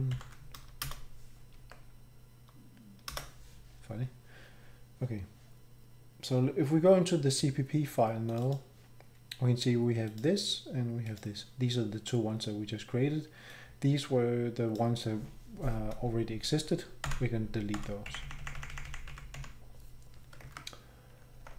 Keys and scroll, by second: 0.1 ctrl+., 0.8 Return, 1.7 Escape, 3.1 Return, 17.0 Delete, 17.7 Delete, 18.4 Up, 18.9 Up, 19.1 Down, 19.4 Delete, 20.4 ctrl+Tab, 21.3 Page_Up, 21.4 Page_Up, 21.5 Page_Up.